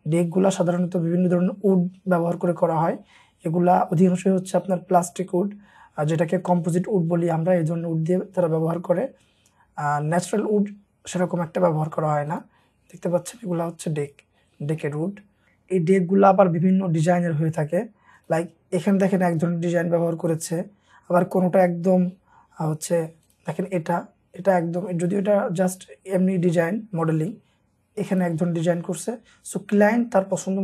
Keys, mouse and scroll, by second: 11.8-14.9 scroll down 1, 15.2-16.2 scroll down 1, 21.1-22.7 scroll down 1, 27.0-27.7 scroll down 1.